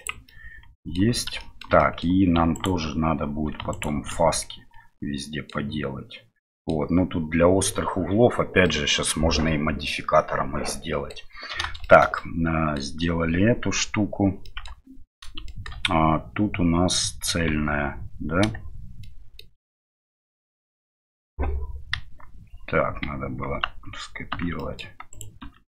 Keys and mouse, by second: 0.3 middle click, 1.5 shift+click, 1.8 click, 12.2 middle click, 14.4 middle click, 15.4 shift+middle click, 17.5 Tab, 19.0 shift+middle drag, 21.9 KP_1, 24.7 middle click.